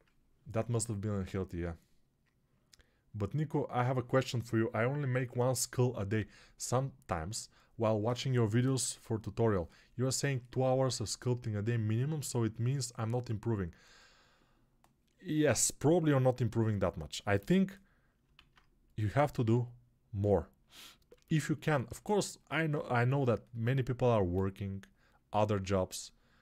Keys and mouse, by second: 17.3 g, 18.3 alt+q, 22.9 3.